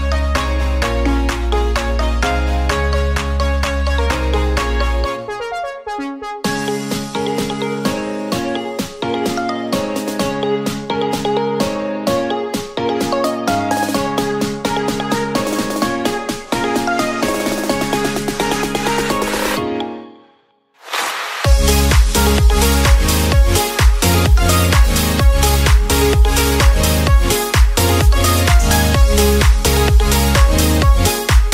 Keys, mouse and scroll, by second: 0.0-0.4 scroll down 2, 0.4 middle click, 0.7-1.1 scroll down 1, 1.1 click, 1.7-2.2 middle drag, 2.2 click, 2.6-3.7 middle drag, 3.7 click, 4.0 Tab, 4.5-6.8 middle drag, 6.8-9.2 drag, 9.2 Tab, 9.7 click, 10.2-13.1 middle drag, 13.1 click, 13.5-15.3 middle drag, 15.3 r, 18.4 middle click, 19.2 KP_1, 20.3-20.6 drag, 20.9 click, 21.7 Tab, 22.7 ctrl+r, 25.4 ctrl+r, 29.2 click, 29.8-31.1 middle drag, 31.1 c.